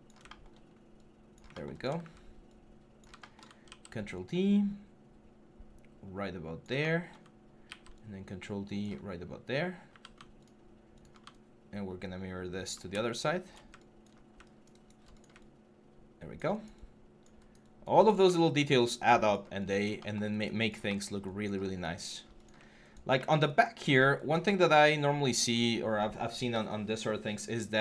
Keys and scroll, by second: 1.8 w, 3.4 ctrl+d, 7.4 ctrl+d, 9.7 typing, 13.9 6.